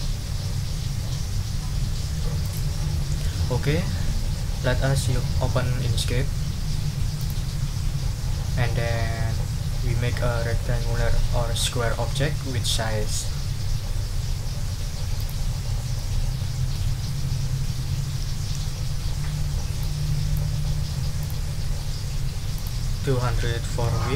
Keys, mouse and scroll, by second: 2.4 click, 7.2 click, 15.2 click, 15.7-16.9 drag, 19.8 click, 21.2 click, 22.5 click, 23.2 ctrl+a, 23.7 ctrl+2.